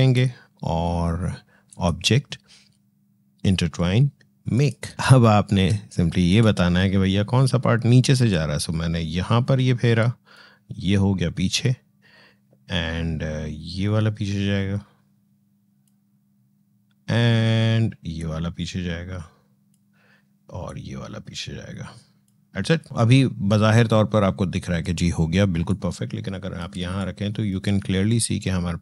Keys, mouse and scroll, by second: 4.3 click, 4.9-5.2 alt+scroll up 1, 5.5 space, 5.7 click, 6.0 space, 8.1-12.7 drag, 13.6-18.0 drag, 18.0-20.5 drag, 20.5-26.6 drag, 26.6 space, 26.8 click, 27.1 space, 27.9-28.8 drag.